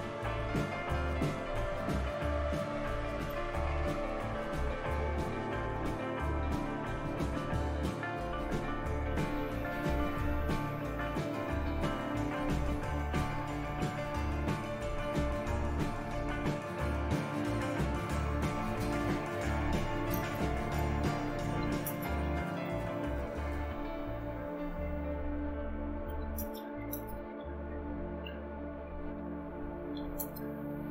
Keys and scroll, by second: 0.0-2.3 typing, 3.1 Return, 9.0 Return, 15.7-17.0 typing, 17.9 Return, 19.5-30.9 typing.